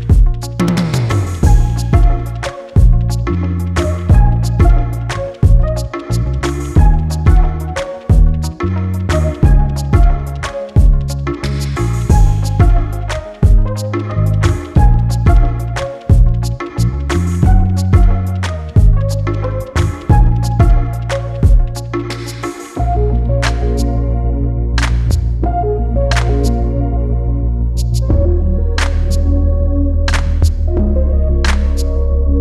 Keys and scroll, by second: 6.1 space, 10.2 space, 16.6 space, 18.1 space, 31.1 space.